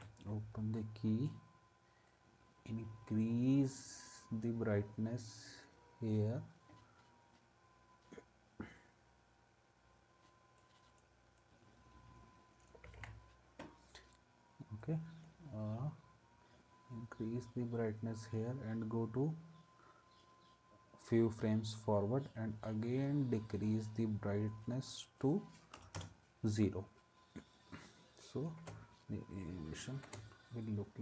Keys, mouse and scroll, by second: 13.0 ctrl+z, 25.7 0, 26.0 Return, 28.6 space, 30.0 space.